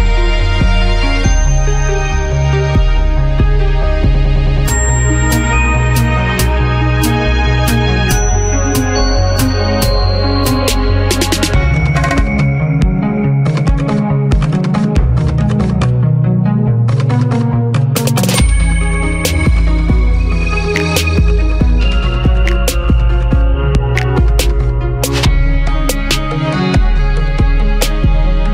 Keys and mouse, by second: 0.6 z, 1.0 click, 1.2 s, 1.6 click, 1.8 s, 2.7 ctrl+a, 5.0-6.6 typing, 6.0 middle click, 8.6 a, 9.3 h, 11.7 a, 11.9 a, 14.0 ctrl+a, 21.0 z, 21.6 Tab, 22.0 ctrl+t, 24.5 q, 26.0 Tab, 26.6 middle click, 28.3 z.